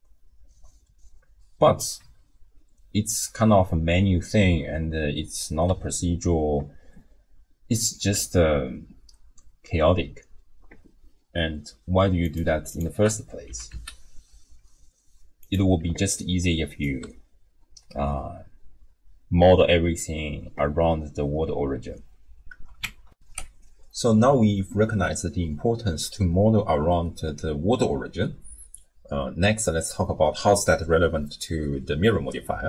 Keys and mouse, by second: 5.7 w, 13.5 g, 15.8 d, 16.1 click, 16.8 d, 17.0 d, 23.1 ctrl+alt+shift+w, 23.3 ctrl+alt+shift+q.